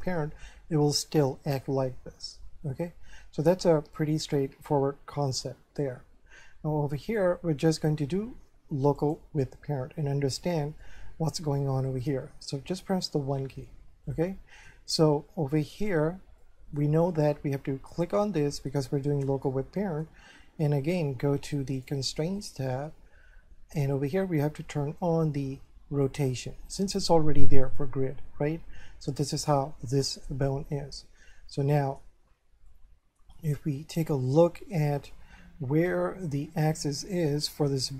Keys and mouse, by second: 7.1 click, 9.0 click, 10.8 shift+middle click, 12.8 1, 14.1 shift+middle click, 16.4 shift+middle click, 17.9 right click, 19.3 middle click, 21.8 click, 26.1 click, 28.5 middle click, 32.7 shift+middle click.